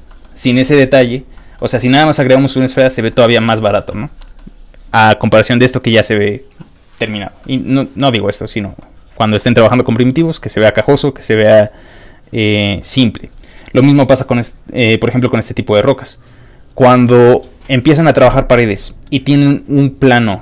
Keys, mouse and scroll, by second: 0.1 middle click, 0.6 middle click, 1.3 middle click, 2.7 middle click, 4.2 middle click, 7.4 middle click, 8.5 scroll down 2, 8.6 middle click, 8.8 middle click, 10.6 click, 11.8 middle click, 13.0 middle click, 13.3 middle click, 13.4 scroll up 1.